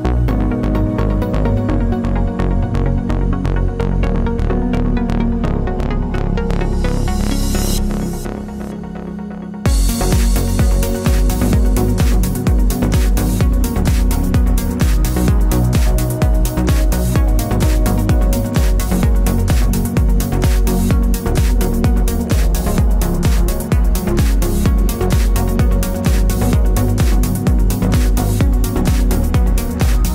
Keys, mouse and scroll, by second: 0.5 click, 1.3-2.8 typing, 3.8 click, 11.3 space, 11.4 click, 13.4 -, 16.5 ctrl+-, 17.7 ctrl+click, 22.5 click, 28.5 KP_1, 29.0 Tab, 29.5 KP_3, 29.6 KP_0.